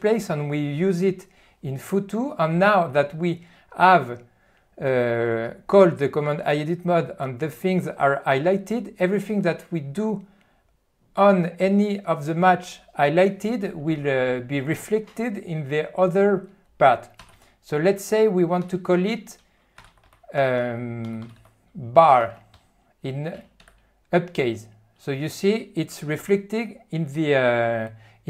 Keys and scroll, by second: 17.3 f, 18.7-21.2 typing, 22.6 ., 23.4 ..